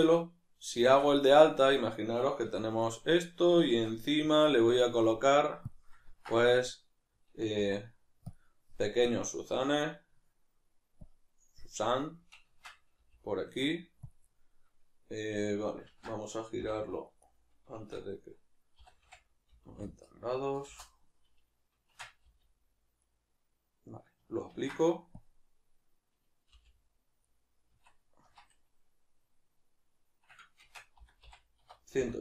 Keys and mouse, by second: 0.7 shift+d, 1.3 right click, 2.4 \, 3.0-12.5 middle drag, 3.7 shift+a, 7.6 s, 12.5 shift+Tab, 12.5-14.3 drag, 14.3-17.8 middle drag, 15.9 ctrl+z, 17.8 shift+Tab, 23.1 right click, 24.5 ctrl+a, 27.3 right click, 27.7 Tab.